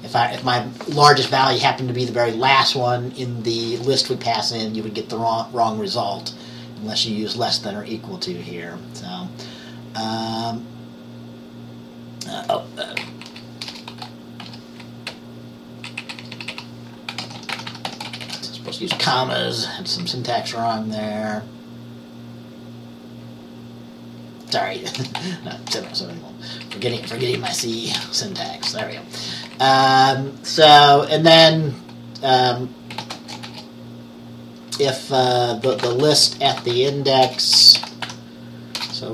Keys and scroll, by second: 13.4 Right, 13.8 BackSpace, 14.5 ,, 15.2 Right, 15.7 Right, 16.1 Right, 17.0-18.5 typing, 19.0 Down, 20.0 Down, 25.1 BackSpace, 25.6 ;, 26.0 Right, 26.5 Right, 26.6-27.2 Right, 28.1-29.8 typing, 32.9-34.1 typing, 35.5-38.9 typing.